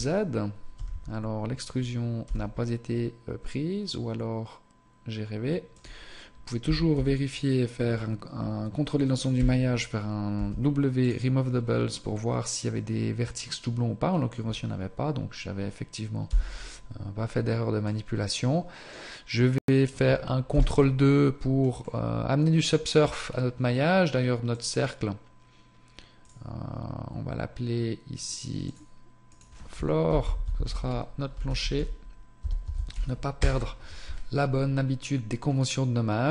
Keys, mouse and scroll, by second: 0.8 z, 2.3 e, 6.7 a, 7.0 a, 16.4 Tab, 17.9 middle click, 20.5 ctrl+2, 21.8 middle click, 23.2-23.6 scroll up 1, 24.5 click, 30.5 o, 32.7 o, 36.2 scroll up 1.